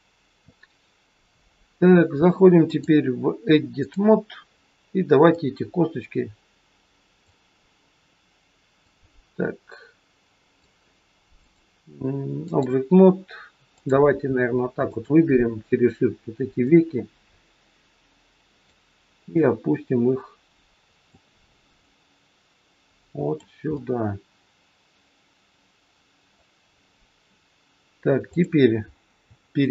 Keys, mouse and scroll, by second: 2.7 click, 5.3 click, 8.8 click, 11.3 click, 14.8 shift+click, 16.7 click, 19.3 click, 21.8 click, 23.7 middle click, 28.2 click, 28.8-29.2 scroll up 2.